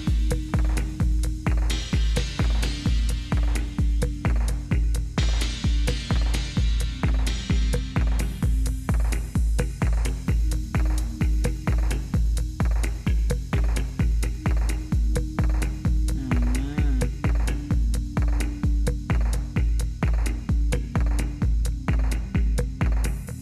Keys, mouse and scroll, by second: 0.0-1.1 typing, 5.1 Down, 7.2 space, 7.9 Up, 8.8 Return, 9.9 Right, 10.3 Return, 14.3 m.